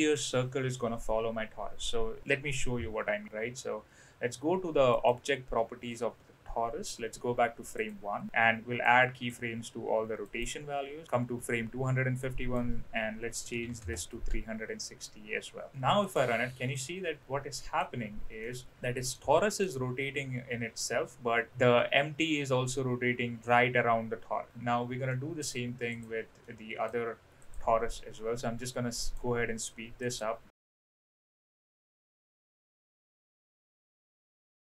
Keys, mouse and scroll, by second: 4.9 click, 8.8-9.3 drag, 10.2 click, 12.2-14.6 drag, 15.7 space, 16.0 click, 16.4 middle click, 17.2-17.8 middle drag, 18.4 middle drag, 19.1-19.7 middle drag, 25.1 middle click, 25.9 click, 26.4-26.8 middle drag, 28.7-29.2 middle drag, 30.1 click, 30.5 click, 30.6 middle click, 30.8-31.8 typing, 31.0 click, 31.1 click, 32.9 ctrl+p, 33.1 click, 33.2 click, 34.2 ctrl+p, 34.4 click, 34.7 click.